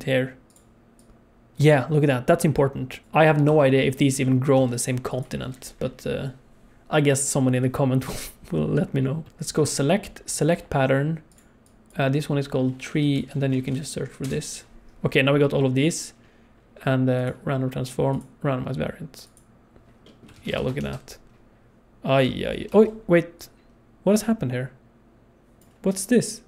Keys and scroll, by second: 3.0 shift+d, 3.5 shift+d, 4.6 shift+d, 20.3 alt+a, 20.5 ctrl+s, 20.8 space, 22.6 space.